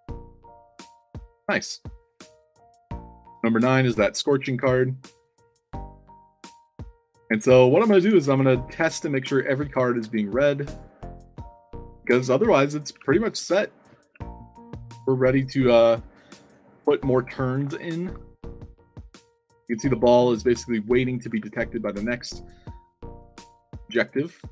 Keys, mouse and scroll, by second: 0.4-3.3 typing, 3.6 click, 5.9-8.1 typing, 9.6-15.3 typing, 17.6 e, 21.2 e, 24.3 d.